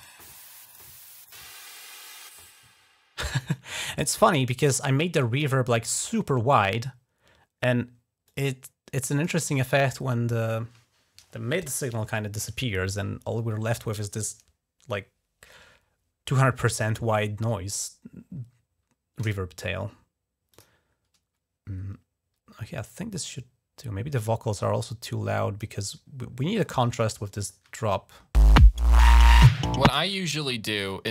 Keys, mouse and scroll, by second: 0.4 click, 1.1 click, 3.2 click, 4.4 click, 5.4 click, 5.6 click, 8.0-9.5 drag, 20.3 click, 22.5 click, 22.9 scroll up 1, 24.3-25.4 drag, 26.4 scroll up 1, 27.2 click, 27.5 space, 28.0-28.3 scroll up 1, 29.0-29.4 scroll down 2, 29.8 space, 30.7-31.1 scroll up 3.